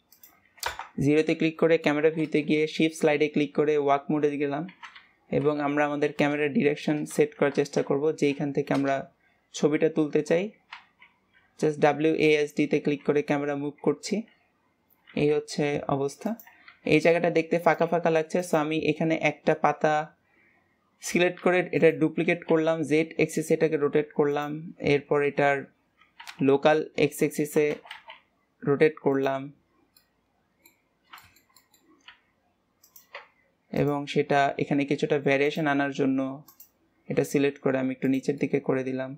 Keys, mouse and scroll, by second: 0.6 KP_0, 2.0 `, 18.3 click, 21.4 shift+d, 22.2 r, 29.9-30.8 middle drag, 30.8 scroll up 1, 31.1-32.0 shift+middle drag, 32.0 r, 33.6 click, 35.4 click, 36.4 click, 37.0 g, 38.4-39.1 middle drag.